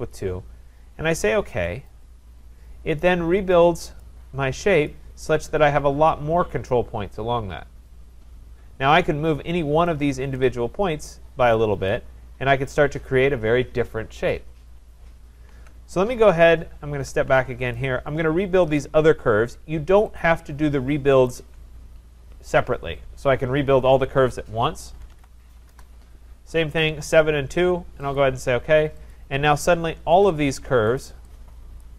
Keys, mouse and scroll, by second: 1.9 click, 4.0 click, 4.9 click, 10.4 click, 11.9 click, 15.6 ctrl+z, 16.9 ctrl+z, 17.8 click, 18.8 click, 20.2 shift+click, 21.3 click, 24.8-25.7 typing, 28.2 click, 29.1 click, 30.2 click, 31.0 click.